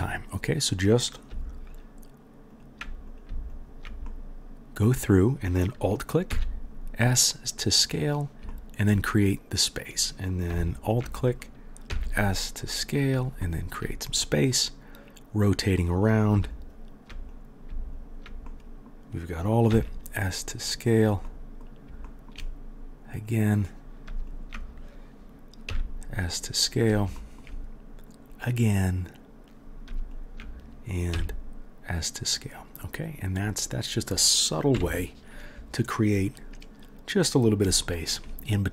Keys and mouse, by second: 3.5 alt+middle click, 3.5 alt+right click, 6.3 s, 9.7 middle click, 9.8 click, 10.6 alt+middle click, 10.8-38.7 alt+drag, 11.9 s, 15.3 right click, 15.9 right click, 16.5 alt+right click, 17.2 right click, 18.0 alt+right click, 19.7 s, 23.2 middle click, 23.2 right click, 24.3 alt+middle click, 24.3 alt+right click, 25.7 s, 28.3 middle click, 28.3 right click, 28.9 middle click, 28.9 right click, 30.1 alt+middle click, 30.1 alt+right click, 31.1 s, 34.7 KP_1.